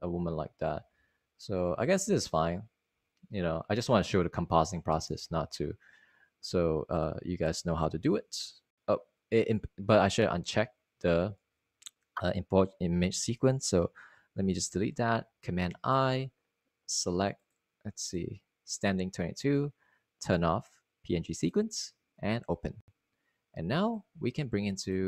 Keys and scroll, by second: 0.1 Down, 0.2-0.9 typing, 1.5 Up, 3.2 Up, 3.4 Up, 3.8 Up, 8.0 Return, 10.4 Return, 16.2 a, 16.3 BackSpace, 17.6 super+i.